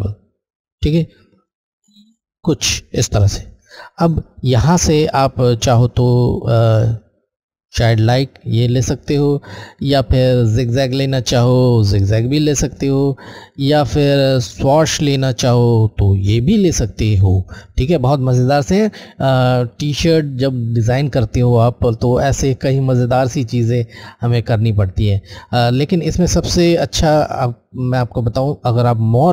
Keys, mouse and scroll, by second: 6.2 click, 7.1 Left, 7.1 click, 26.0 click.